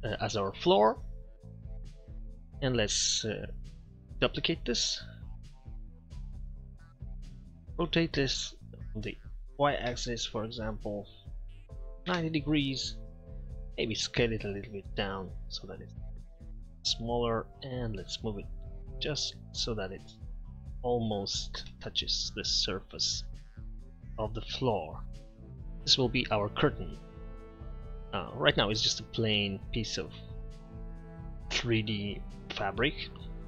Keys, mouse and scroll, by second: 1.4 middle click, 2.8 Tab, 4.1 shift+d, 7.8 r, 13.6 Tab, 14.3 s, 17.0 Tab, 30.5 middle click.